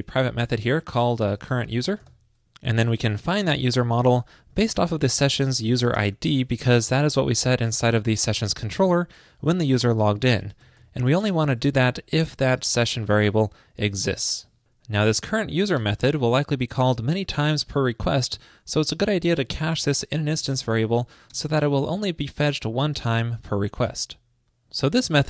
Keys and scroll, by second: 7.8 alt+shift+Left, 8.5 alt+shift+Left, 8.9 super+c, 9.3 super+Right, 11.8 super+v, 15.8 alt+shift+Left, 23.9 super+s.